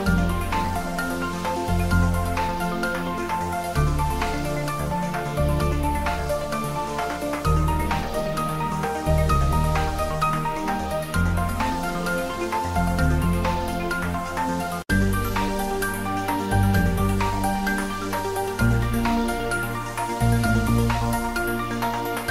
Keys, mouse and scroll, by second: 0.8 ctrl+s, 4.7 ctrl+s, 5.1-7.1 ctrl+middle drag, 7.1-8.8 typing, 7.5 click, 8.9 click, 10.7 shift+click, 11.1 g, 11.7 click, 13.7-16.9 drag, 16.9-18.8 drag, 18.8-20.3 drag, 20.8-22.3 drag.